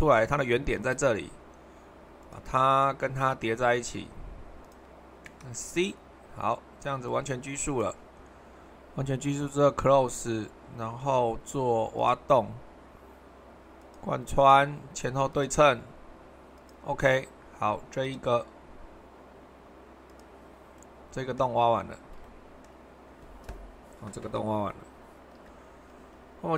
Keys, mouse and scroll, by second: 0.7 Escape, 4.6-6.5 drag, 7.1-8.8 drag, 9.2-10.3 drag, 11.9-13.1 drag, 13.8-16.2 drag, 25.4 super+1.